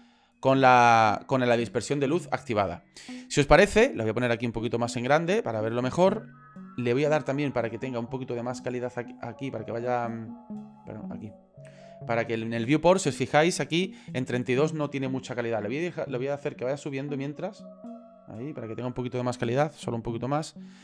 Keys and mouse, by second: 4.0 ctrl+middle click, 4.9-6.0 shift+middle drag, 6.6 click, 11.2-13.2 drag, 16.4-18.9 drag, 19.6-20.7 drag.